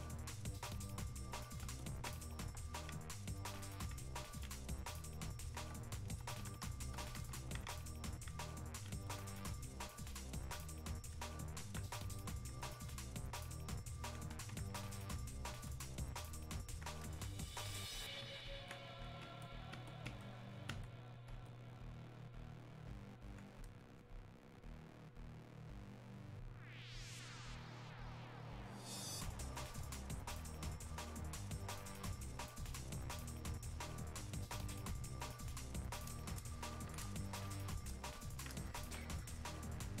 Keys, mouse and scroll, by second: 9.3-13.5 drag, 13.5-16.9 alt+drag, 17.3-21.0 drag, 25.6 click, 35.0 click, 37.5-38.8 drag, 38.8-40.0 alt+drag.